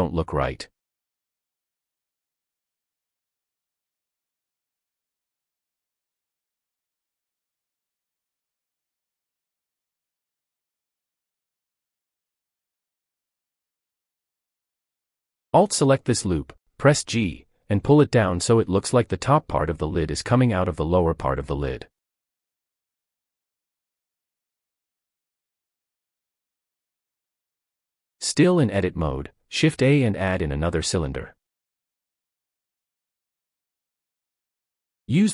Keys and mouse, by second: 0.0 click, 0.7 middle click, 2.1 click, 4.9 click, 6.9 middle click, 7.0 click, 7.1 middle click, 7.4 click, 8.1 click, 9.8 click, 10.1 middle click, 10.6 click, 10.7 middle click, 10.9 click, 11.0 middle click, 14.9 alt+click, 16.6 middle click, 17.6 g, 18.0 z, 19.5-20.5 middle drag, 20.9 click, 21.1 middle click, 21.1 click, 21.3 middle click, 22.2 Tab, 22.4-26.0 middle drag, 29.1 shift+a, 34.7 g, 34.9 z.